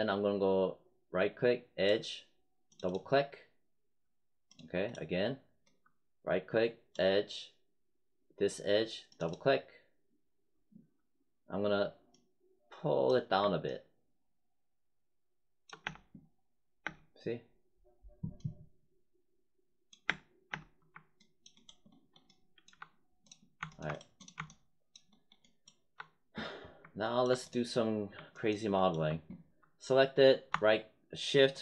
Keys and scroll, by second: 15.7 space, 20.0 space.